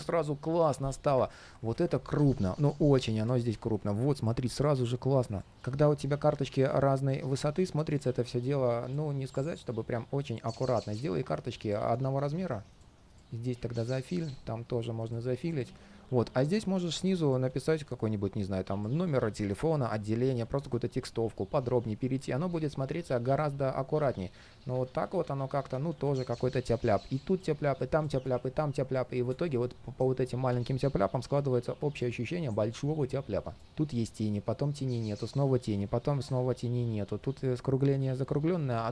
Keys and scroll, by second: 1.1 super+z, 3.2 shift+super+z, 17.3 super+z, 20.2 super+z, 24.7 super+z.